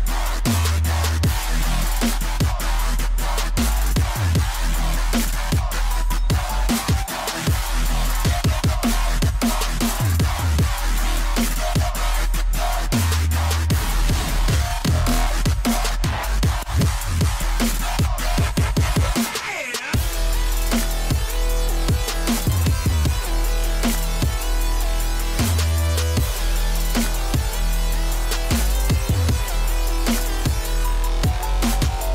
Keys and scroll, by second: 2.1 e, 4.1-4.5 typing, 4.5 Return, 6.5-7.4 typing, 7.6 Return, 9.4 f, 14.9 2, 16.7-17.7 typing, 20.7-21.9 typing, 22.1 Return, 25.0 e, 27.2 3, 27.6 Return.